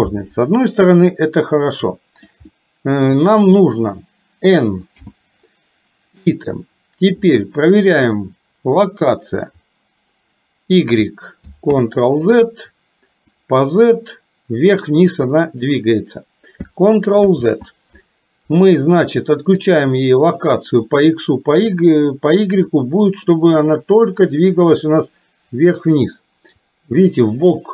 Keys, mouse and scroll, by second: 0.8-2.3 middle drag, 2.5 middle click, 5.0 n, 8.8-11.0 drag, 11.7 ctrl+z, 13.5-15.8 drag, 17.3 ctrl+z, 19.6 click, 20.3 click, 22.7 middle click, 24.3-26.1 drag, 26.6-27.7 drag.